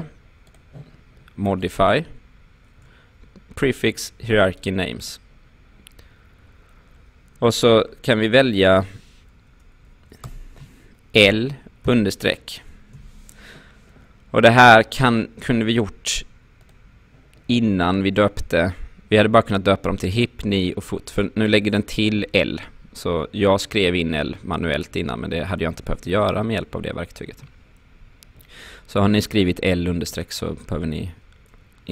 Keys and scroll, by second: 10.2 BackSpace, 11.2 shift+l, 11.9 shift+-, 26.8 ctrl+z.